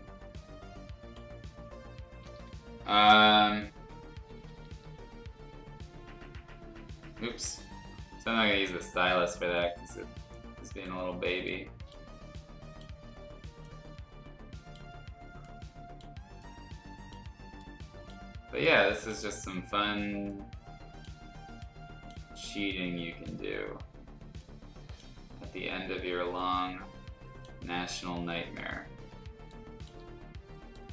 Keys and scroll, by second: 4.2 ], 4.3 ], 4.5 ], 4.7 ], 7.4 ctrl+z, 29.4 space.